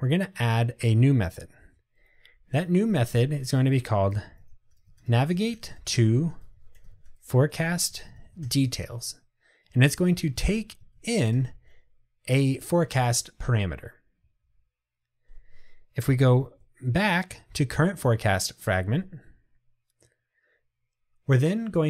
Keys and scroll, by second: 11.4 Return, 16.6 super+e.